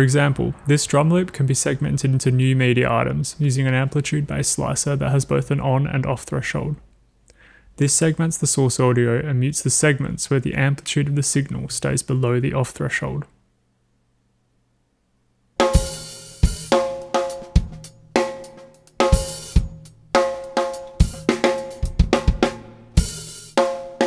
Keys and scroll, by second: 15.1 w, 15.5 space.